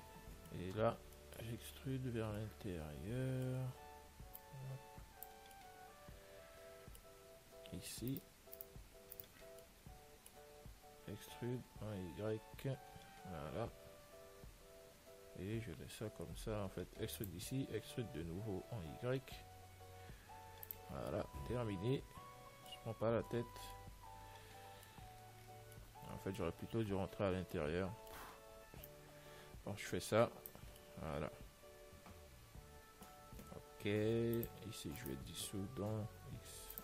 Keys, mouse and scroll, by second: 0.1-4.7 middle drag, 4.7 click, 5.8-8.4 middle drag, 8.4-11.3 right drag, 9.9-11.9 middle drag, 11.4 e, 17.9 e, 21.3-23.6 middle drag, 23.6 Tab, 23.7-26.9 middle drag, 27.2 Tab, 27.7 middle click, 27.8-29.2 middle drag, 29.2 click, 29.6 middle click, 31.1-34.7 middle drag, 34.7 click, 35.3-36.8 right drag, 36.5 x.